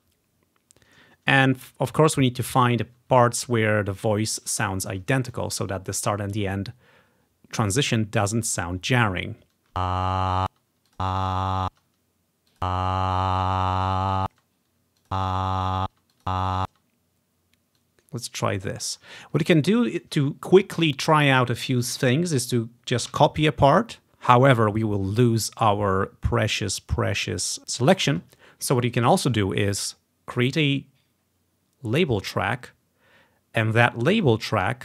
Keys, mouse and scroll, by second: 5.2 scroll up 1, 9.8 space, 10.7 space, 10.9 click, 11.3 click, 11.8 space, 12.6-14.2 drag, 14.4 space, 15.1-17.2 drag, 16.1 space, 16.8 space, 17.8-20.3 drag, 19.3-19.7 ctrl+scroll down 1, 23.2 ctrl+c, 30.4 click, 32.4 click, 34.3-34.8 drag.